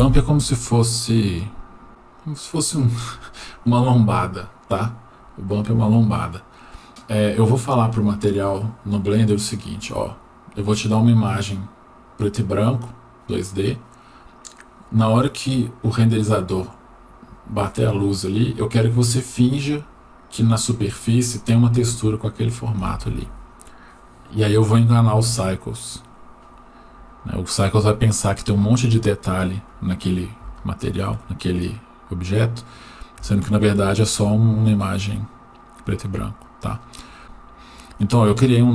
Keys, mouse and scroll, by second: 27.9-28.9 drag, 29.9-30.4 scroll up 1, 30.6 shift+middle click, 31.6 click, 32.2-32.8 drag, 33.5 shift+middle click, 34.5 click, 35.0-36.9 drag, 38.0 click, 38.6-38.7 drag.